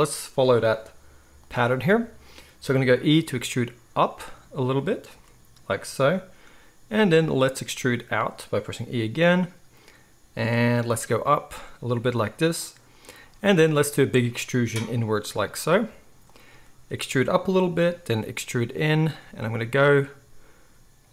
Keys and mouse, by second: 0.0-21.1 middle drag, 5.1 e, 7.7 e, 10.9 e, 13.2 e, 16.4 e, 17.8 e, 19.2 e, 20.7 e.